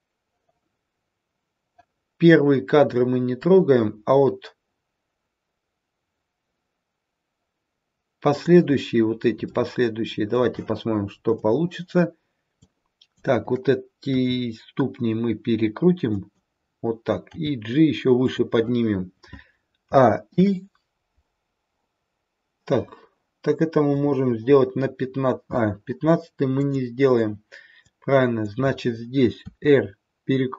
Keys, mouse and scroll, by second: 8.9-9.5 scroll up 1, 9.5 shift+middle click, 9.5-10.4 scroll up 1, 11.3 click, 14.0 click, 14.0 r, 19.9 a, 20.3 i, 23.8 click, 26.5 click, 27.8 click, 29.4 r.